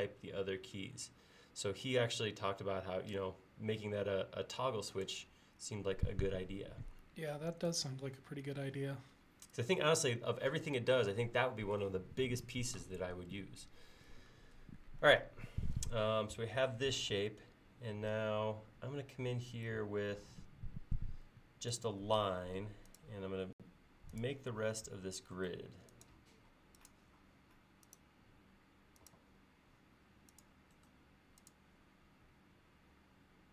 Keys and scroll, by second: 21.8 l.